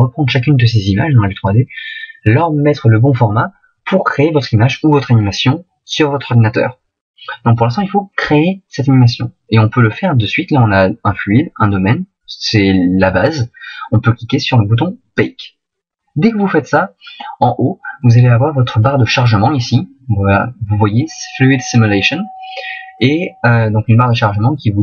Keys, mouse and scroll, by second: 16.9 click.